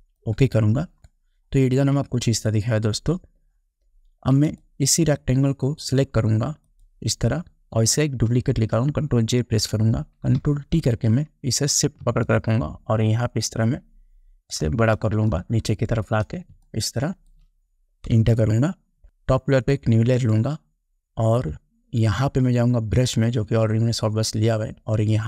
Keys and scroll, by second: 1.0 ctrl+0, 9.6 ctrl+j, 10.9 ctrl+t, 15.3 space, 18.3 Return.